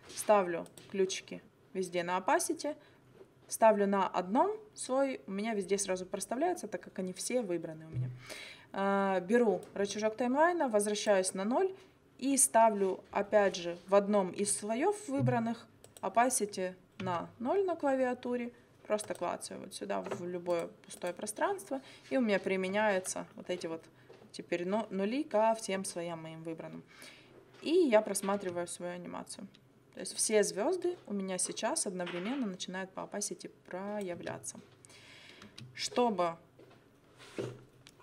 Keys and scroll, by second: 17.0 0, 28.4 space, 34.1 space.